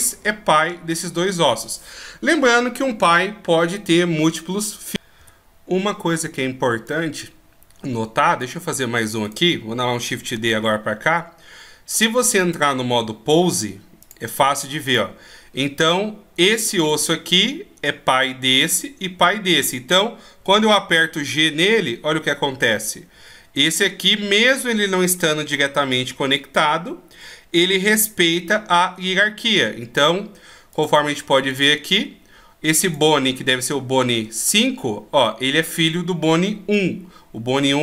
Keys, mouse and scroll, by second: 7.0 click, 9.4 right click, 10.3 shift+d, 14.2 click, 15.1 click, 17.0 right click, 20.6 g, 30.9 click, 31.7 click, 33.6-35.2 scroll down 1.